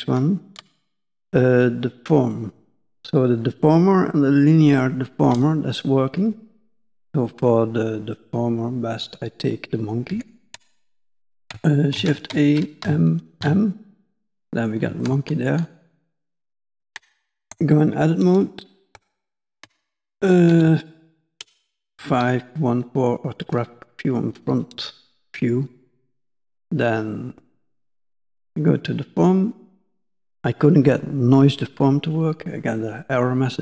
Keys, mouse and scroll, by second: 10.1 x, 12.1 shift+a, 14.2 scroll down 2, 14.3 middle click, 15.0 ctrl+middle click, 16.1 middle click, 17.5 Tab, 19.0 shift+middle click, 20.3 KP_5, 20.5 KP_1, 23.1 scroll up 1, 23.6 shift+middle click, 27.7 click, 28.6 click.